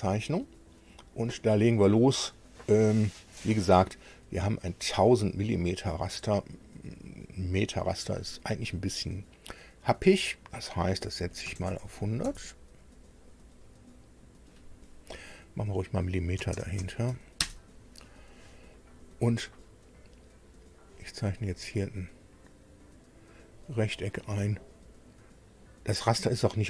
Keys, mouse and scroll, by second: 0.0-0.3 scroll down 1, 6.3 click, 11.2 KP_1, 11.4 KP_0, 11.7 KP_0, 12.2 KP_Enter, 15.4 Right, 16.4 space, 16.6 m, 20.8 click, 21.6 click, 23.4 click.